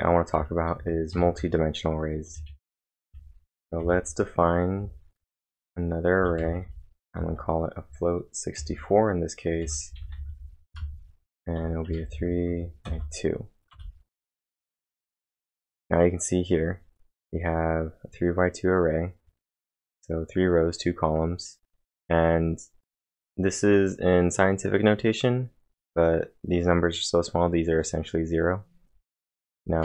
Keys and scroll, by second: 0.2-3.8 typing, 5.3-8.6 typing, 9.6-12.9 typing, 13.7 Return.